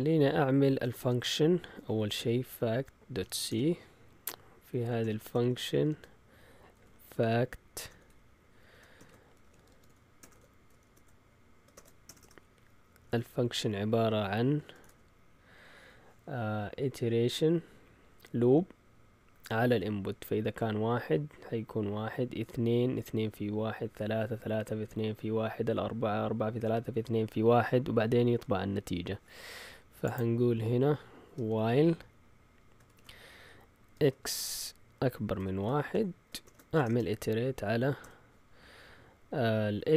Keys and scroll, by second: 0.5-12.8 typing, 14.4-15.1 typing, 31.3-31.6 typing, 32.8 typing, 33.9 typing, 35.3-38.5 typing, 35.8 shift+Tab.